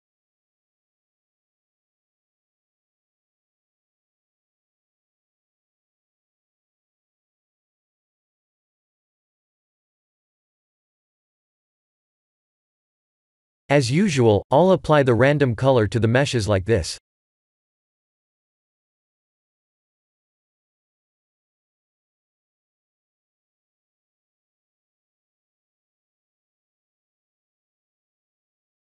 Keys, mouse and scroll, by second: 0.6 middle click, 2.1 click, 3.1 scroll down 3, 3.5 middle click, 10.2 click, 11.3 ctrl+s, 12.0 click, 12.6 click, 15.4 shift+a, 19.7 click, 19.9 shift+a, 25.1 click, 27.3 click.